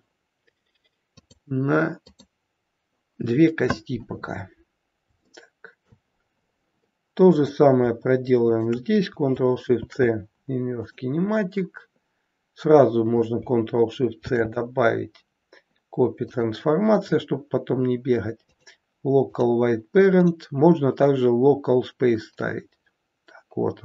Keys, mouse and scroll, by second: 1.1 click, 1.1-1.5 scroll down 4, 2.0 click, 4.7 scroll up 1, 5.1 shift+middle click, 6.1-6.7 scroll down 2, 7.2 click, 8.4 shift+click, 9.7 ctrl+shift+c, 14.1 ctrl+shift+c, 16.9-17.5 scroll down 5, 18.5 click, 18.5-19.4 scroll down 3, 20.1 click.